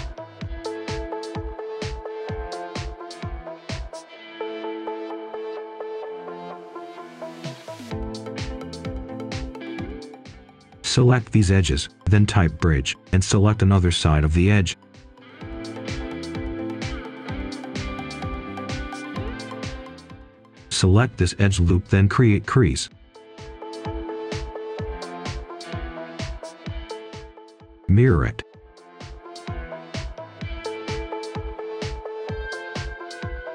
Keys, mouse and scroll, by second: 1.1 click, 2.3-2.8 scroll up 1, 2.9 right click, 4.4 ctrl+shift+click, 4.9 right click, 5.8 ctrl+right click, 6.8 right click, 7.8 ctrl+shift+click, 8.3 shift+right click, 8.9-9.3 scroll up 1, 9.9 ctrl+shift+click, 10.3-10.6 scroll down 1, 10.6-11.6 scroll up 1, 11.6 typing, 12.5 Return, 13.7 click, 16.2 right click, 18.1 click, 19.4 ctrl+shift+click, 20.6 typing, 20.9 Return, 21.8 click, 22.0 Tab, 23.2-23.6 scroll down 1, 23.6 scroll up 1, 23.8 right click, 24.2 Tab, 24.9 click, 27.6 Tab, 28.7 typing, 29.1 Return, 30.5 click, 30.7-32.2 scroll down 1, 32.2 click, 33.0 right click.